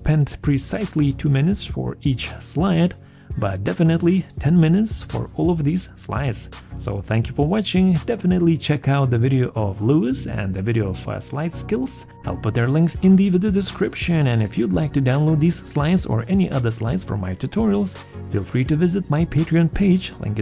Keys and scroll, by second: 5.3 t, 5.7 w, 5.8 o, 7.9 t, 8.0 h, 8.3 r, 8.5 e, 10.5 f, 11.0 o, 11.1 u, 11.6 r.